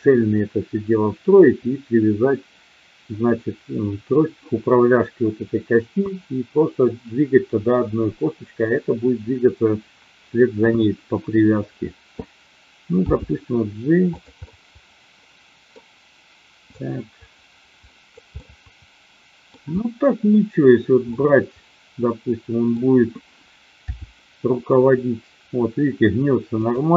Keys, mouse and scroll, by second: 13.0 g, 14.2 click, 14.4 scroll up 1, 14.5-15.7 middle drag, 16.7-18.0 drag, 18.4-19.5 middle drag, 21.0 scroll up 1, 21.2-22.8 middle drag, 23.8 r, 26.5 click.